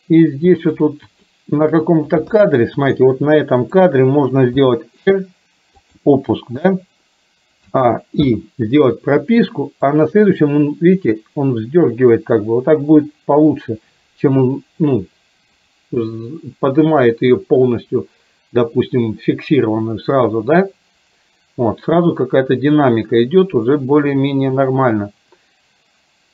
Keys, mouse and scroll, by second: 1.3-1.8 shift+middle drag, 2.4 KP_1, 4.6 r, 7.8 a, 8.3 i, 10.0-26.3 drag.